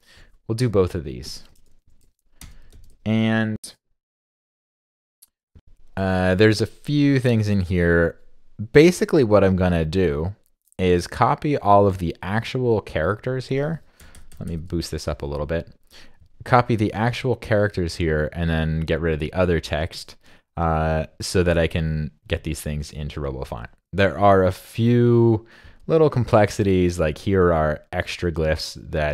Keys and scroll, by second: 1.8 super+Down, 2.7 super+v, 14.0 super+=, 14.1 super+=.